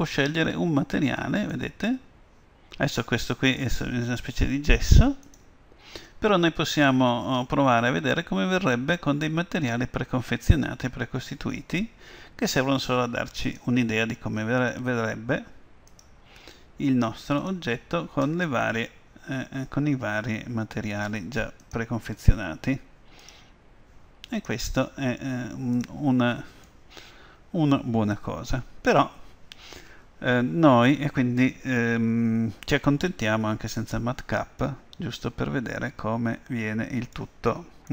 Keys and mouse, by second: 1.6-5.3 middle drag, 5.3-7.2 drag, 8.1-10.0 middle drag, 13.5-15.3 drag, 16.0-17.8 drag, 18.5-20.4 middle drag, 21.7-23.5 drag, 24.5-26.3 drag, 26.7-28.4 middle drag, 33.9-35.7 drag, 35.7-36.7 middle drag.